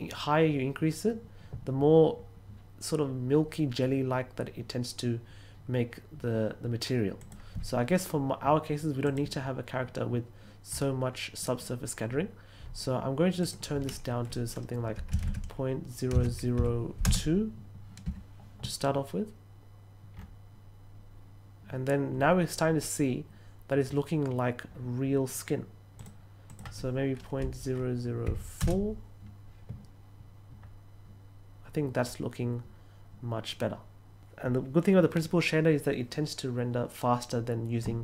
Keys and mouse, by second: 7.1 click, 9.0 click, 13.3 click, 17.0 Return, 25.9 click, 26.4 click.